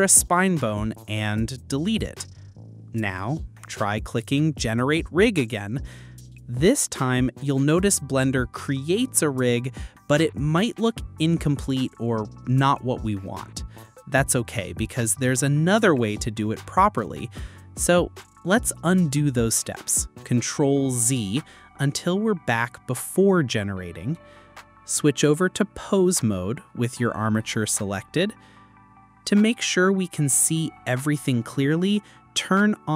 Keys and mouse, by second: 0.8 click, 4.7 click, 8.6 click, 19.6 ctrl+z, 25.9 /, 29.1-29.8 drag.